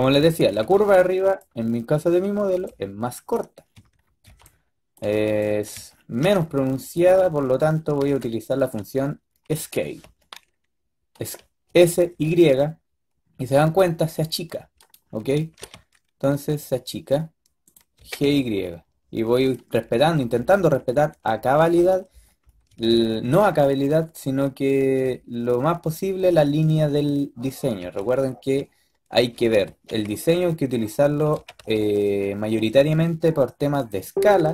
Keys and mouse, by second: 0.1 a, 0.3 a, 0.5 a, 0.7 b, 2.4 b, 3.5 click, 4.1 b, 5.0 b, 6.1 b, 8.0 b, 9.4 s, 11.6 s, 15.2 s, 17.8 g, 27.7 b, 29.5 s, 31.2 g, 34.1 b.